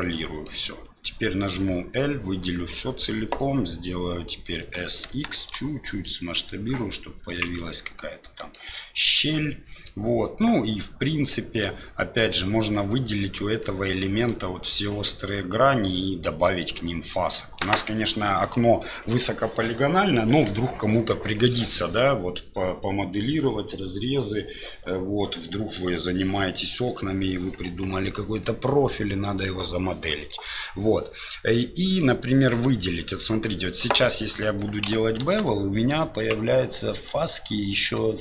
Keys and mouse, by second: 4.9 s, 7.7 middle click, 9.3 middle click, 13.7 middle click, 28.4-29.5 middle drag, 30.2 middle click, 31.4 middle click, 33.1 middle click, 35.2 ctrl+b.